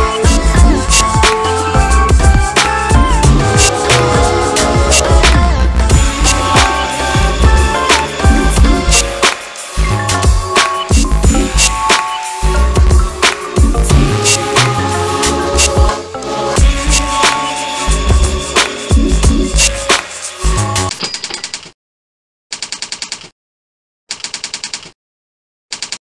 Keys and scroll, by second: 19.6 F4, 19.9 F9.